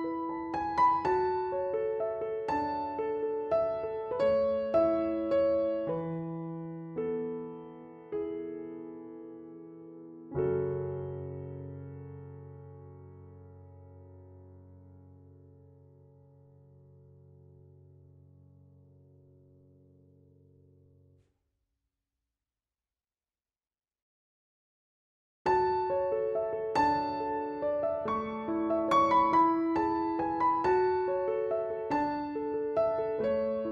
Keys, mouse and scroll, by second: 18.9 ctrl+click, 19.6 click, 20.7 right click, 23.5 click, 26.0 click.